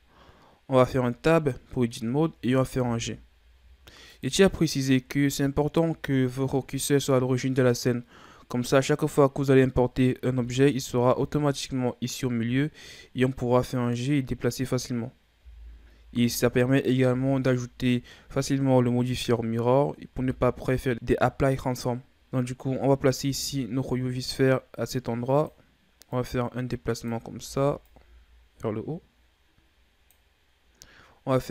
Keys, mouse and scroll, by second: 0.8 Tab, 1.5-2.8 scroll down 2, 2.8 g, 5.5-6.0 shift+scroll up 3, 10.4 KP_3, 13.0 shift+scroll down 4, 13.6-15.4 scroll up 3, 15.4 g, 17.1 KP_1, 18.3-19.1 ctrl+scroll up 2, 19.1-20.1 scroll up 2, 20.1 s, 22.3-22.8 scroll up 3, 23.2 s, 26.2 click, 27.3 ctrl+z, 27.8 click.